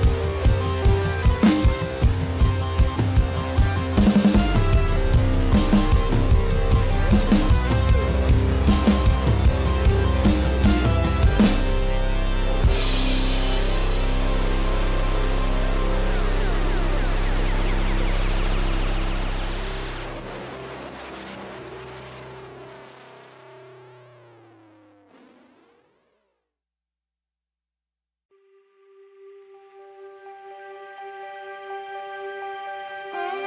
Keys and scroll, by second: 8.4 space.